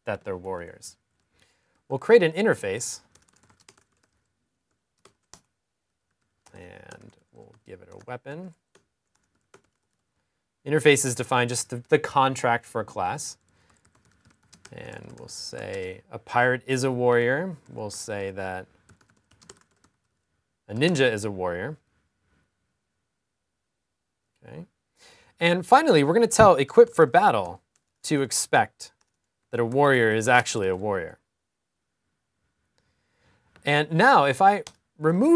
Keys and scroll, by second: 0.2-3.0 typing, 5.4-6.6 typing, 6.8 super+s, 9.8 typing, 15.5-18.5 typing, 23.6 typing, 28.0 typing, 32.0 super+s.